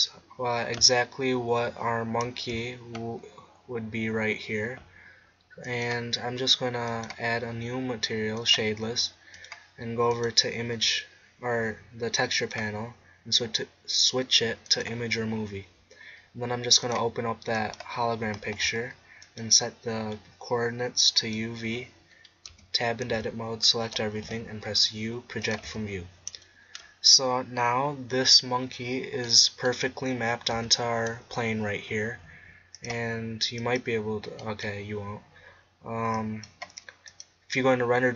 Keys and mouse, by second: 2.5 z, 5.7-11.9 drag, 12.8-14.2 drag, 15.2-21.1 drag, 22.5 Tab, 23.1 a, 24.3 u, 25.7 Tab, 30.5 z.